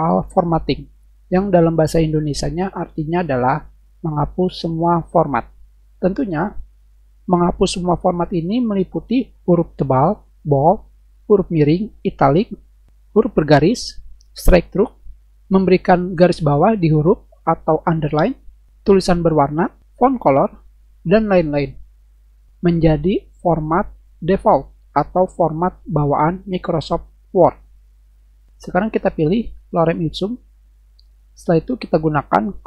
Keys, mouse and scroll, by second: 30.5 click.